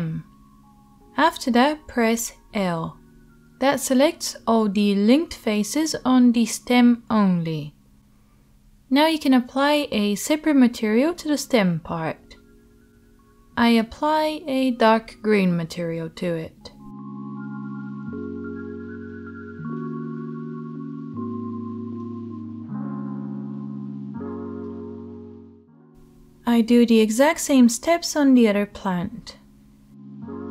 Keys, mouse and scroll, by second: 2.3-15.3 drag, 2.3 l, 10.0 l, 11.9 right click, 13.0 l, 15.3-16.6 middle drag, 16.6 right click, 17.1-19.4 shift+middle drag, 18.8 e, 19.4 right click, 19.5 middle click, 19.6-22.2 right drag, 22.2-23.4 middle drag, 24.2-25.0 drag, 25.2 click, 25.2 l, 25.3 shift+Tab, 25.4 l, 29.2 Tab, 29.4-30.5 drag, 29.9 Tab.